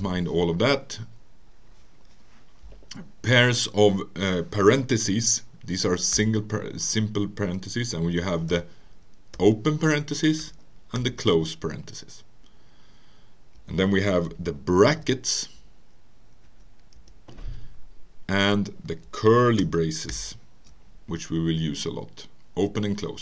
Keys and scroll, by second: 0.0 BackSpace, 6.1 (, 7.9 Right, 9.4 BackSpace, 11.0 ), 13.6 Return, 14.9 alt+8, 16.5 Right, 17.0 Return, 20.1 alt+shift+(, 22.9 Right.